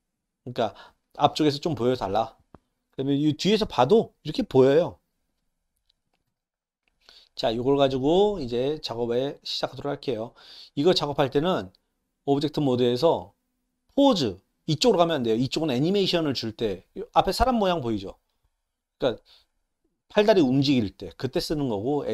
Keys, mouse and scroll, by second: 2.9-5.8 middle drag, 6.3 KP_1, 8.0 click, 8.9-9.2 drag, 10.4 click, 12.7-22.1 drag.